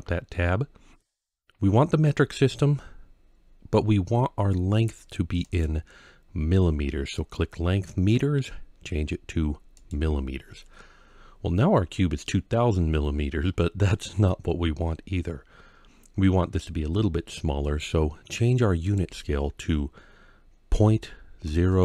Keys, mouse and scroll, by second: 5.3-9.7 drag, 18.7-21.8 drag.